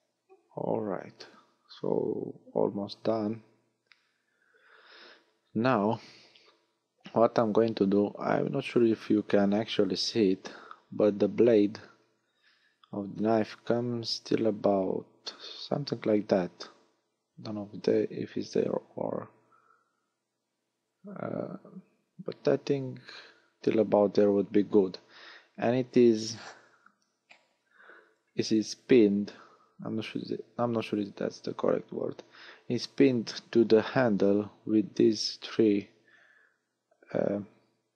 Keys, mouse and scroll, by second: 0.8-1.4 scroll down 1, 1.5 scroll up 1, 2.2 scroll up 1, 8.7 a, 11.1-11.9 scroll down 1, 11.9-12.3 scroll down 3, 12.3-13.6 scroll up 4.